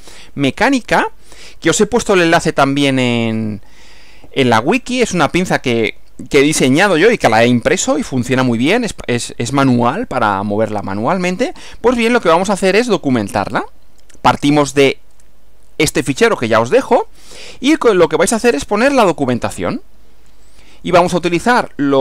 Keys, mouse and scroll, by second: 16.2 Right.